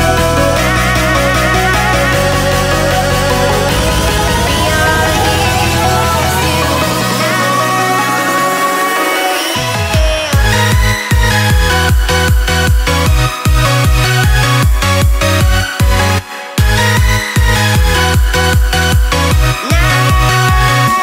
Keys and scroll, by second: 2.8 z, 3.0 ctrl+0, 3.5 z, 3.9-4.3 space, 4.3 z.